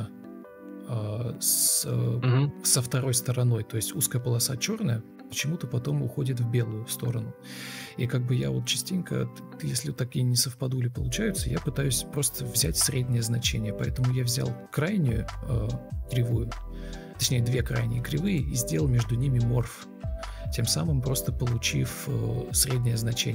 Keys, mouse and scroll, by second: 20.1 ctrl+v, 20.2 space, 21.5-22.6 typing.